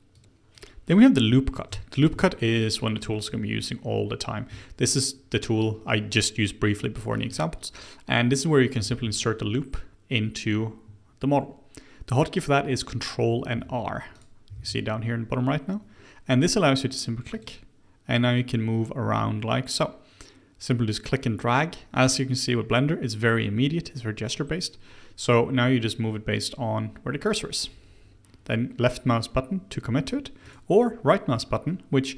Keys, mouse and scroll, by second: 0.5 click, 0.9 click, 1.4 scroll down 2, 1.7 shift+middle click, 2.1 Tab, 2.3 click, 2.6-3.4 middle drag, 3.4-4.5 scroll up 2, 4.5 Tab, 8.8 ctrl+r, 14.5 ctrl+r.